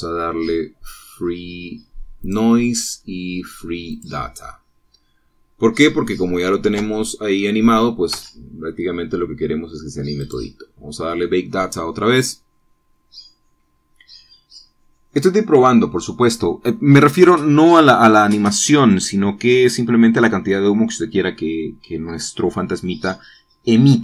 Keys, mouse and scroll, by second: 0.6 scroll down 1, 0.7-1.1 scroll up 1, 2.3-3.4 scroll down 2, 3.4 click, 3.9-4.4 scroll up 2, 5.1 click, 6.7-7.8 middle drag, 7.9 space, 9.3 Escape, 11.3 click.